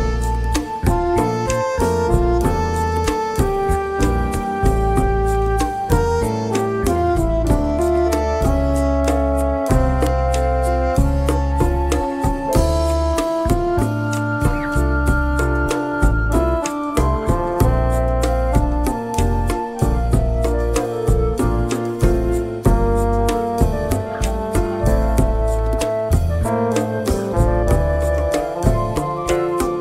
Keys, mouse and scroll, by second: 0.7 click, 3.7 F1, 5.0 ctrl+click, 5.5 ctrl+d, 6.3 shift+click, 7.4 ctrl+KP_Multiply, 11.9 KP_Subtract, 13.3 KP_Add, 18.3 shift+F6, 21.2 click, 21.9 click, 23.2 shift+click, 23.9 click, 25.0 click, 25.9 click, 26.9 click, 27.4 click, 27.9 click, 28.3 click, 29.0 click.